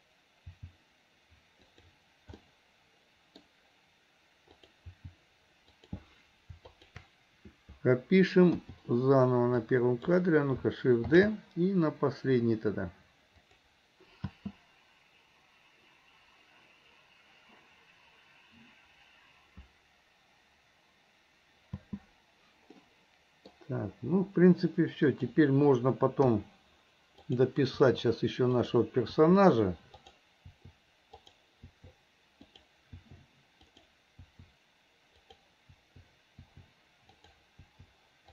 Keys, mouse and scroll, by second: 2.5-4.6 middle drag, 4.6 click, 22.9-24.9 middle drag, 25.2 click, 26.4 i, 27.4 drag, 27.9 i, 28.7 drag, 30.2 click, 30.6 i, 31.4 drag, 31.8 i, 32.7 drag, 33.9 click, 34.4 i, 35.4 drag, 35.9 i, 37.3 drag, 37.7 i.